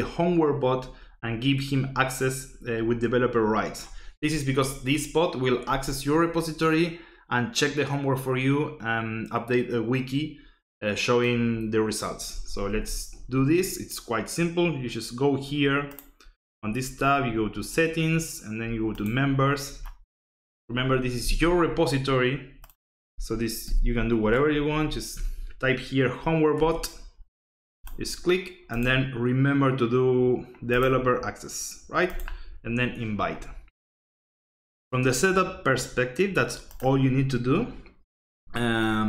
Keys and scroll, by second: 12.7 alt+Tab, 23.4-25.5 typing, 26.6 BackSpace.